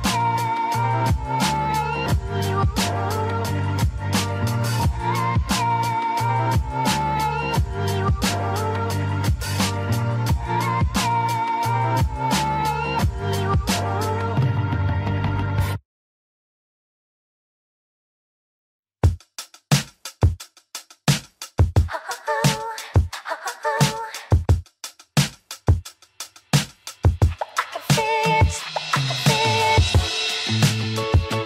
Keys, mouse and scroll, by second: 13.1 alt+click, 16.4 scroll up 2, 22.4 alt+Num_Lock, 22.4-22.7 alt+scroll up 1, 22.7 right click, 22.8-28.3 alt+right drag, 28.3-31.4 alt+drag.